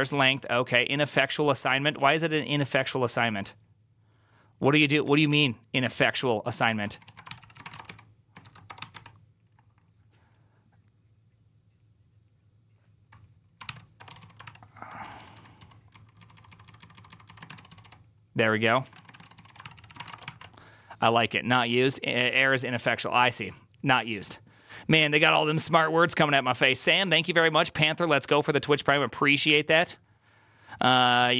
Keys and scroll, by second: 0.0-1.8 typing, 6.4-9.3 typing, 6.8 ctrl+a, 6.9 ctrl+a, 7.2 ctrl+c, 13.8 ctrl+c, 13.8-20.3 typing, 14.3 ctrl+c.